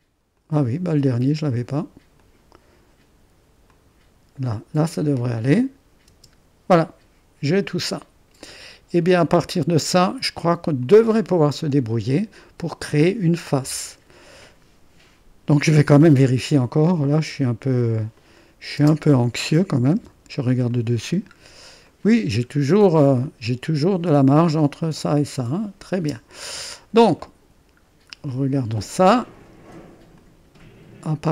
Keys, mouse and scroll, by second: 0.4 click, 2.1 click, 3.6 click, 4.4 click, 6.0 space, 8.4-10.2 drag, 11.1-12.2 middle drag, 12.6-14.6 middle drag, 18.1-19.9 drag, 18.8 space, 19.9 space, 20.6 click, 21.8 scroll up 1, 21.9 click, 22.4 scroll up 1, 23.0-25.2 drag, 25.9 space, 26.5 middle click, 26.5-27.2 scroll down 1, 27.2 click, 28.0-28.4 scroll down 1, 28.4 scroll up 1, 28.5-29.1 scroll down 1, 30.1-31.3 drag.